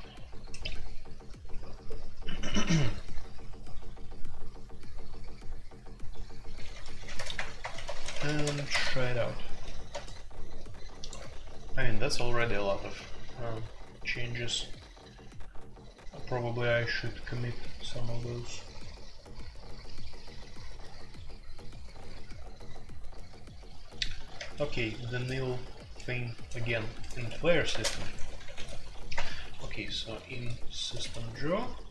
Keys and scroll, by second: 7.0-8.5 typing, 8.7 shift+Return, 27.2 Escape, 27.7-28.8 typing, 29.1 Return, 30.7-31.9 typing.